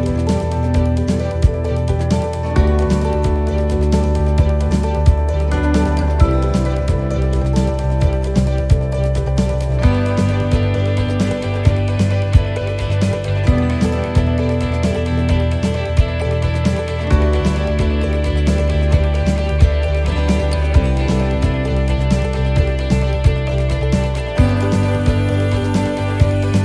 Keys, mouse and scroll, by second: 2.8-3.2 scroll up 2, 3.2 middle click, 3.8-4.3 scroll up 1, 4.3 shift+middle click, 5.2 middle click, 6.1-6.5 scroll down 2, 6.5 middle click, 7.0-7.3 scroll down 1, 7.3 middle click, 7.6 scroll down 2, 8.1 middle click, 10.8 shift+middle click, 11.2 scroll up 4, 11.7 shift+middle click, 12.3 middle click, 12.7 scroll up 2, 13.2 middle click, 14.3 scroll down 1, 14.8 middle click, 18.2 click, 19.2-19.6 scroll up 3, 19.6 middle click, 20.2 shift+middle click, 20.5-20.8 scroll up 1, 20.8 middle click, 21.8 middle click, 22.8 right click, 24.2 shift+right click, 25.9 middle click, 26.5 shift+middle click.